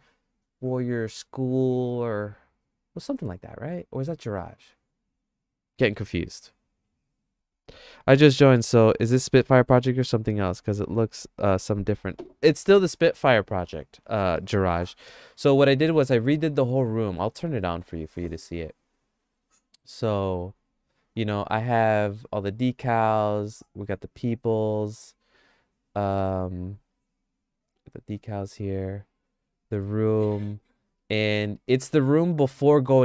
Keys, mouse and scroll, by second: 12.8 click, 12.8 right click, 12.9 middle click, 13.4 middle click, 13.7-14.7 shift+middle drag, 15.4 middle click, 16.0 middle click, 16.4 shift+middle click, 17.6 middle click, 20.4 click, 22.5 click, 25.4 click, 31.0 middle click, 31.2-33.0 shift+middle drag.